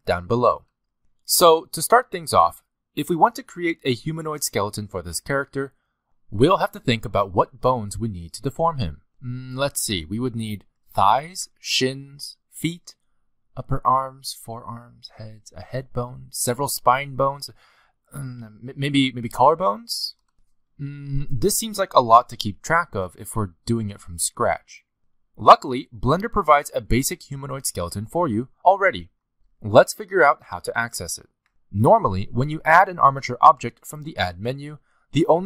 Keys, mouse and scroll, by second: 34.9 click.